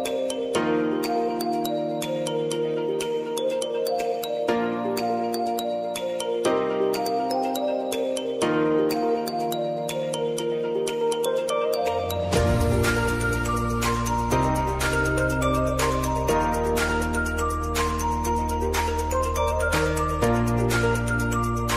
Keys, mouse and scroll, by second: 11.9 space, 14.1-15.6 drag, 19.2 ctrl+a, 19.5-21.0 typing.